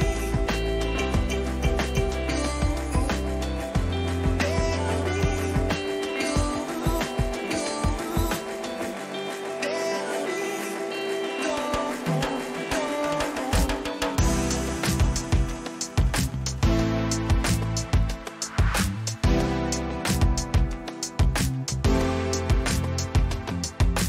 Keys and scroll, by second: 2.9 ctrl+t.